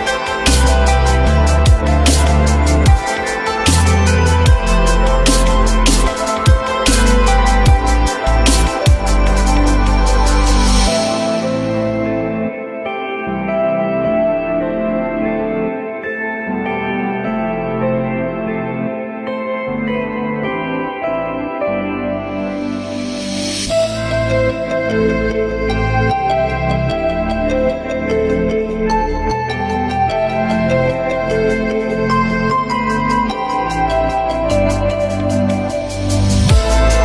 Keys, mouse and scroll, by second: 0.9 alt+middle click, 4.2 alt+middle click, 5.1 alt+middle click, 5.2-6.3 alt+scroll up 1, 7.1 alt+middle click, 7.8-9.8 typing, 10.2 F3, 15.5 F3, 16.2 alt+middle click, 16.9 alt+middle click, 19.3 ctrl+z, 22.4 alt+middle click, 28.0 z.